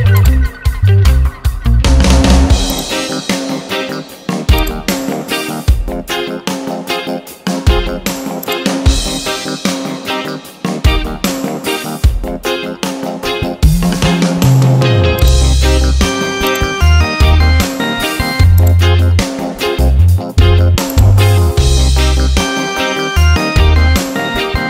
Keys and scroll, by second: 9.8 Return, 13.7 ctrl+j, 17.3 ctrl+t, 22.5 Return.